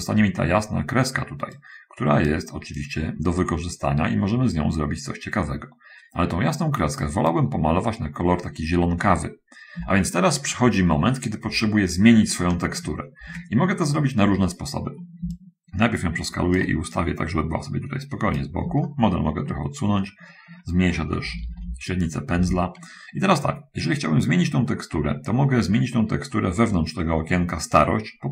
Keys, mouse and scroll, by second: 1.9-7.2 right drag, 15.7-17.1 shift+right drag, 17.3-18.9 shift+right drag, 19.1 shift+middle click, 21.5 [, 21.8 [, 22.8 [.